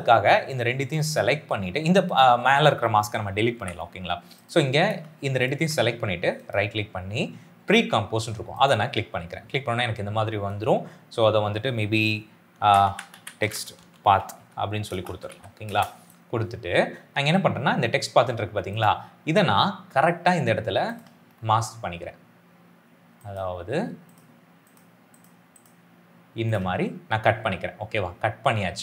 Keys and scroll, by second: 3.4 Delete, 12.3-15.6 typing.